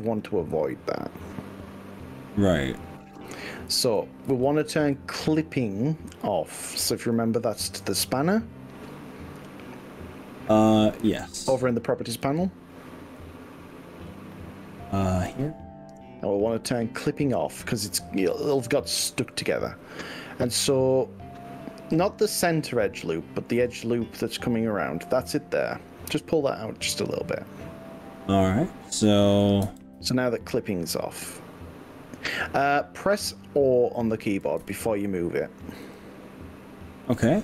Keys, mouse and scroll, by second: 0.2 click, 0.5-1.2 scroll up 4, 1.2 scroll down 1, 1.6 middle click, 2.6-3.2 scroll down 5, 3.8 ctrl+z, 4.4 ctrl+z, 5.1-5.6 scroll up 4, 6.1 scroll down 1, 7.2 click, 11.5-12.1 scroll down 4, 12.4 z, 15.4 click, 16.7 click, 17.8-19.0 scroll up 5, 19.0 scroll down 2, 19.8-20.8 shift+middle drag, 19.8 shift+scroll up 1, 22.0-23.6 middle drag, 24.0 drag, 24.5-29.2 middle drag, 29.2 click, 29.7 g, 34.0 click, 34.6 ctrl+z, 35.9 o.